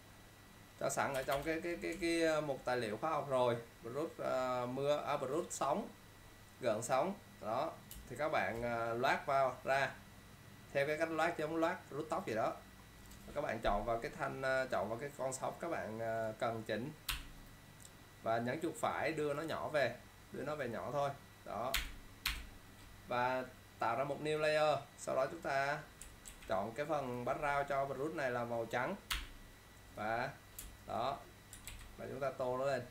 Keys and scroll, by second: 26.4 ctrl+z, 30.7 ctrl+z, 31.1 ctrl+space, 31.8 ctrl+z.